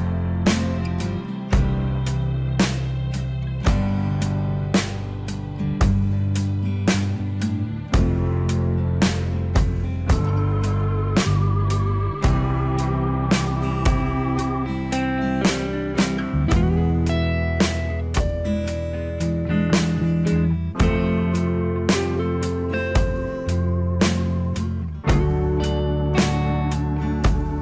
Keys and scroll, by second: 13.9 alt+w.